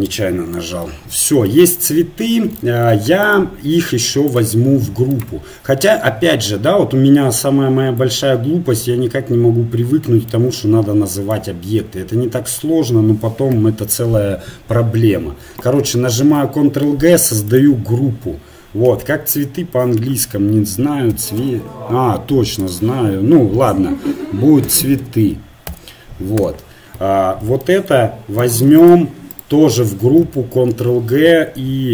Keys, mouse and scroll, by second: 3.3-4.8 drag, 4.3-11.3 right drag, 11.4-16.2 right drag, 16.2 ctrl+g, 28.4-30.7 right drag, 30.7 ctrl+g.